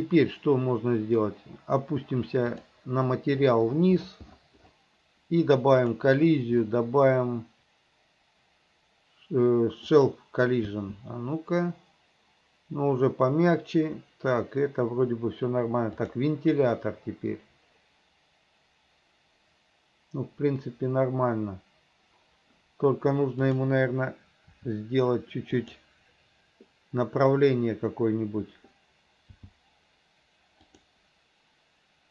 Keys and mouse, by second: 10.1 click, 10.8 space, 16.1 click, 23.6 click, 24.7 r, 29.5 g.